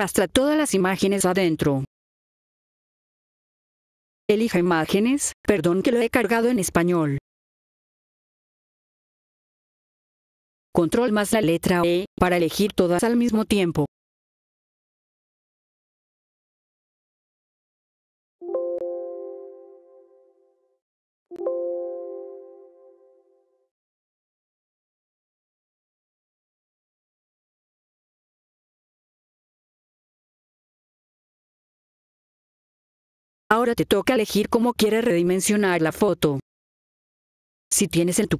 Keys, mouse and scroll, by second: 3.6 F4, 3.6 Num_Lock, 3.6 Caps_Lock, 4.2 click, 7.0 Num_Lock, 7.0 Caps_Lock, 7.0 click, 10.1 F4, 10.7 click, 14.2 e, 17.7 F4, 18.3 ctrl+e, 19.7 click, 21.2 ctrl+e, 22.6 click, 23.0 ctrl+e, 24.8 F4, 28.0 click, 29.9 click, 31.6-32.9 scroll down 2, 32.9 F4, 33.4 click.